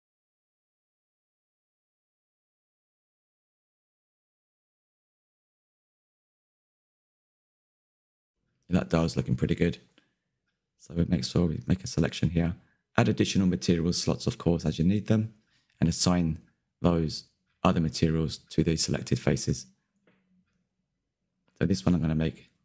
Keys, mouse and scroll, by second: 0.5 click, 0.8 Tab, 0.9-5.5 drag, 8.0 click, 8.1 scroll down 5, 8.4 middle click, 9.3-10.2 scroll up 7, 9.4 Left, 9.5 Tab, 10.2 click, 10.3 middle click, 10.6 click, 10.7 middle click, 10.9-11.4 scroll up 2, 11.0 shift+middle click, 11.7 click, 12.1-12.4 scroll up 1, 12.4 ctrl+KP_Add, 12.6 ctrl+KP_Add, 12.8 ctrl+KP_Add, 13.0 scroll down 4, 13.2 middle click, 14.0 click, 14.3 click, 14.6 Tab, 14.8 Left, 15.0-15.4 scroll down 11, 15.4-15.9 shift+middle drag, 15.9 scroll down 2, 16.0-17.9 shift+middle drag, 17.9 scroll up 6, 18.2 shift+middle drag, 18.4 click, 18.7 KP_Decimal, 18.9 Tab, 19.2 a, 19.3 a, 19.6 l, 20.6 click, 21.6 l, 21.8 scroll down 4, 22.3-22.6 drag.